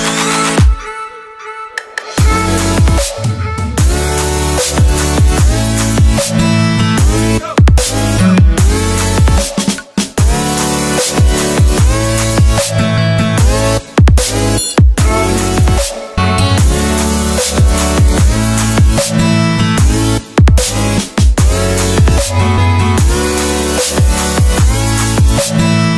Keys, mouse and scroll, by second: 0.6 w, 2.9 shift+Num_Lock, 12.5 BackSpace, 15.3 shift+a, 17.0 shift+2, 18.4 BackSpace, 18.7 2, 20.8 click.